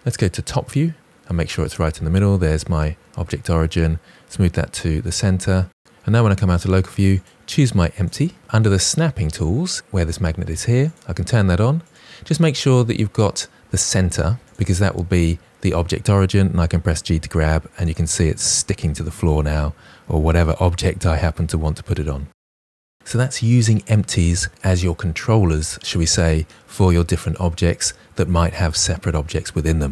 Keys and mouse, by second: 0.4 KP_7, 3.2 g, 6.0 KP_Divide, 10.8 click, 11.8-14.8 drag, 15.9 g, 16.8 click, 17.2 g, 20.8 drag.